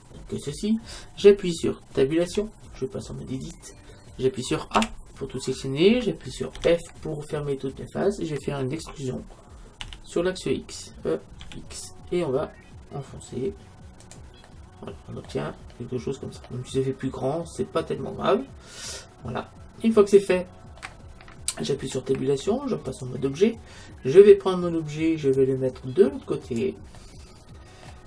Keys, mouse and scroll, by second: 2.3 Tab, 4.8 a, 6.6 f, 9.9 e, 14.2-16.0 drag, 14.5-15.9 middle drag, 16.0-18.4 middle drag, 21.8 Tab, 25.4-27.2 drag, 27.0-28.0 middle drag.